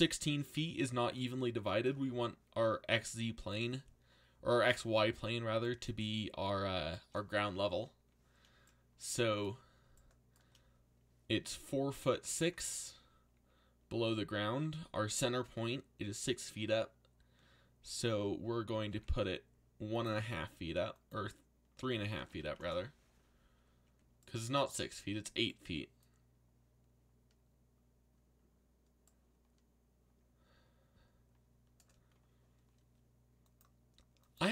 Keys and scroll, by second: 18.5-19.4 typing, 21.5-22.8 typing.